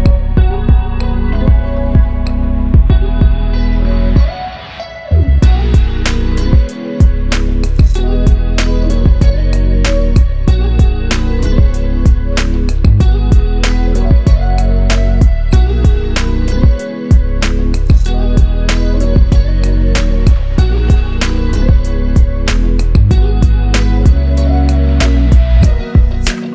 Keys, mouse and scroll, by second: 7.3-8.9 drag, 14.5-16.9 drag, 15.4 click, 17.3-17.8 drag, 21.5 click, 22.3 right click, 22.9-25.2 drag.